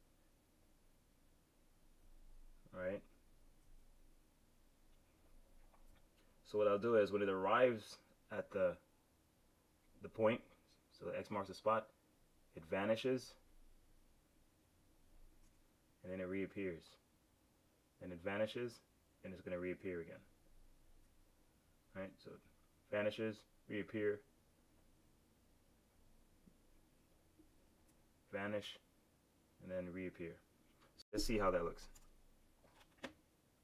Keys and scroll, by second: 1.9 F6, 5.8 F5, 20.9 F6, 31.8 super+Return.